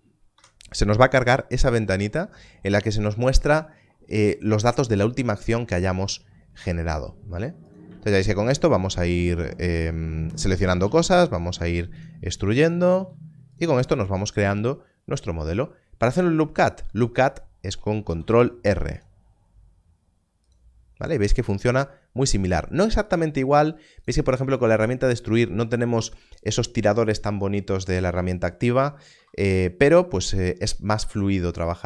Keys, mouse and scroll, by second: 0.3 F9, 7.6 F9, 8.1 shift+click, 12.0 click, 12.6 shift+click, 15.4 e, 18.0 ctrl+r, 20.4 ctrl+r, 21.1 ctrl+r, 23.0 click, 29.1 alt+a, 30.6 click.